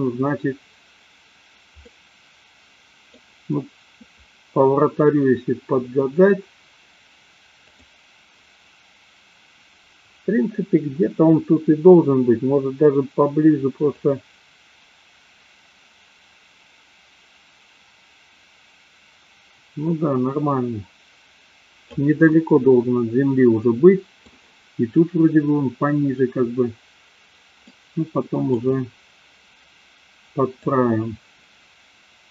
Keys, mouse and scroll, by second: 1.9-3.2 middle drag, 7.9 click, 14.2-22.3 drag, 22.3-24.2 middle drag, 27.7-28.8 middle drag, 30.9-32.3 drag.